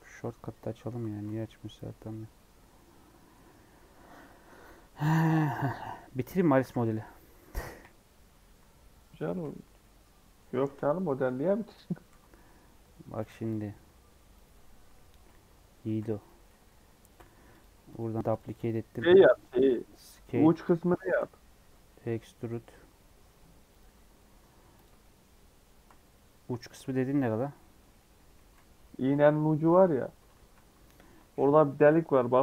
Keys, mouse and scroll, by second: 0.0-0.4 scroll down 1, 0.4 Tab, 0.6 scroll down 4, 1.2-4.2 middle drag, 4.5-5.1 scroll down 3, 5.1-6.8 middle drag, 6.8 scroll down 2, 6.9 middle click, 7.3-7.6 scroll up 1, 7.6 KP_1, 8.0-8.6 scroll down 4, 9.0 scroll up 3, 9.4-11.8 middle drag, 11.8 Tab, 12.0 3, 12.3 middle click, 12.5-12.8 scroll up 3, 13.1 c, 14.5-15.8 middle drag, 15.8 shift+d, 17.1 p, 18.2 Tab, 18.3 click, 18.9 s, 20.3 Tab, 20.9 a, 20.9 shift+middle click, 21.3 scroll down 3, 21.6 e, 23.8 e, 25.0-28.8 shift+middle drag, 28.8-29.2 scroll up 1, 29.2 middle click, 29.7 ctrl+x, 30.3 ctrl+z, 31.7 x.